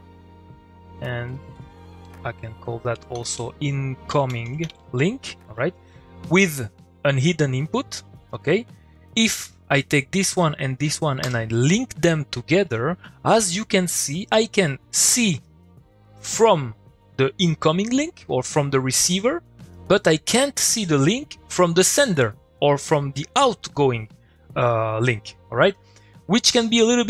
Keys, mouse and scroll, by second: 0.7-2.0 drag, 5.5 typing, 6.0 click, 7.6 click, 7.9 middle click, 9.1 click, 10.1 shift+click, 11.2 u, 12.6 click, 15.1 click, 19.7 click.